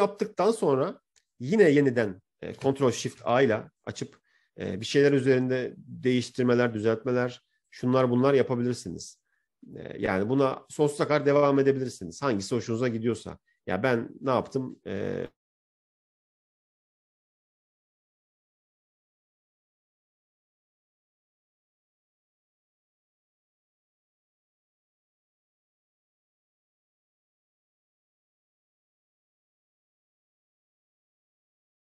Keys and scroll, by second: 3.8 ctrl+shift+a.